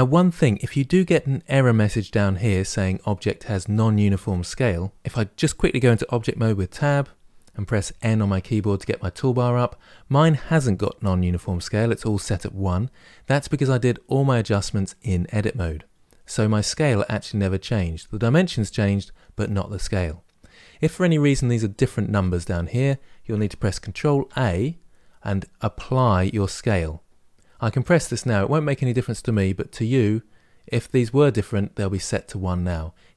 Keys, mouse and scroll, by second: 6.5 Tab, 7.7 n.